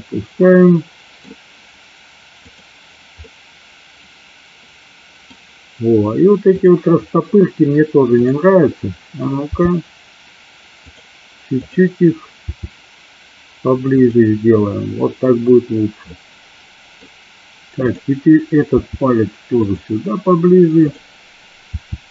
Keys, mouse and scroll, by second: 3.3-5.4 middle drag, 8.2 click, 9.6 r, 10.8 click, 11.7 click, 12.5 r, 16.1-17.1 middle drag, 18.8 r, 19.6 click, 21.0 click, 21.9 r.